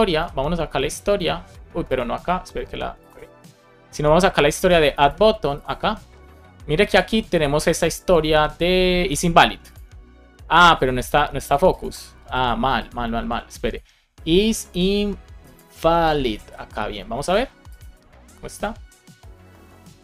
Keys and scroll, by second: 2.2 super+z, 13.0 super+s, 16.0 BackSpace, 16.3 super+s.